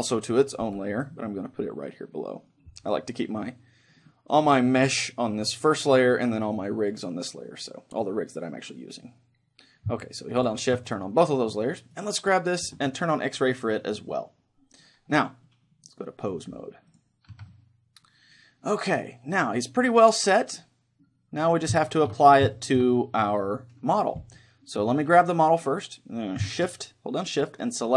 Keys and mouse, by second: 0.6 m, 4.1-6.6 middle drag, 6.6-8.2 drag, 10.4-12.5 drag, 11.0-12.3 middle drag, 12.0-13.6 right drag, 13.4-15.2 drag, 15.2-16.2 middle drag, 16.2-19.0 drag, 17.4 a, 19.0 middle click, 21.9-24.4 middle drag, 25.0-26.9 right drag.